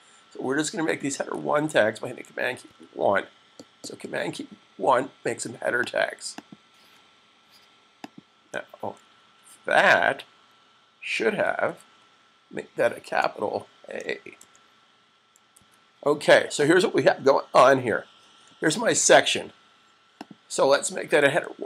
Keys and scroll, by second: 1.1 super+1, 3.3 super+s, 11.4 super+1, 14.3 shift+a, 15.3 super+s.